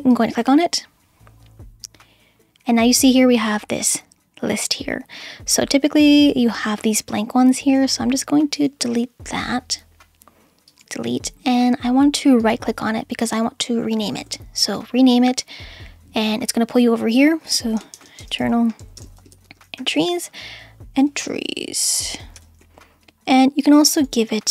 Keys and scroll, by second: 17.7-23.1 typing.